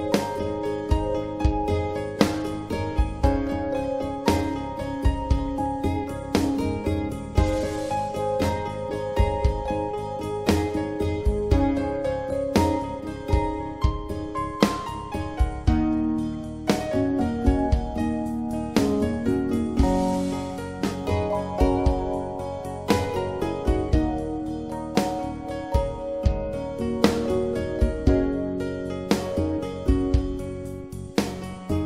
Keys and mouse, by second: 3.8-8.2 right drag, 13.0 ctrl+z, 18.6-19.8 middle drag, 23.0-23.4 typing, 24.2 drag, 28.2 alt+h, 30.9-31.8 drag.